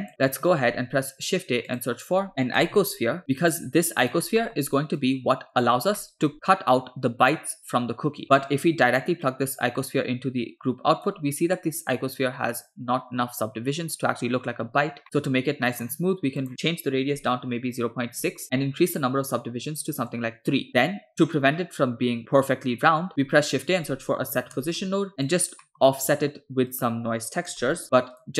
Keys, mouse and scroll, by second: 0.1 scroll down 2, 0.3 middle click, 0.7 shift+a, 4.5 middle click, 5.0 click, 6.1 middle click, 8.2 scroll up 2, 8.3 click, 9.3-11.2 drag, 11.7-13.2 middle drag, 15.0 middle click, 15.7 middle click, 15.9-16.4 scroll up 3, 16.4-18.3 drag, 18.9-20.1 drag, 20.7-21.1 middle drag, 23.1 shift+a, 25.7 middle click, 26.1 shift+a.